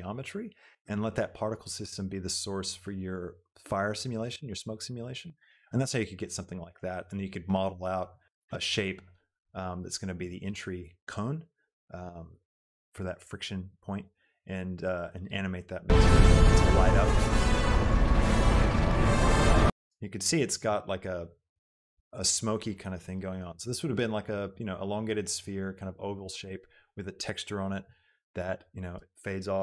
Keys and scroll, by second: 15.9 space, 19.9 space.